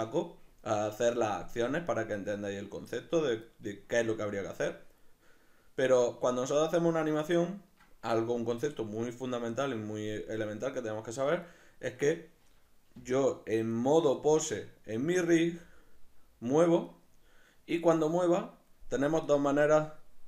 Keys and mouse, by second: 1.1-9.0 middle drag, 9.0 right click, 12.9 g, 13.9 right click, 15.4 g, 17.0 right click.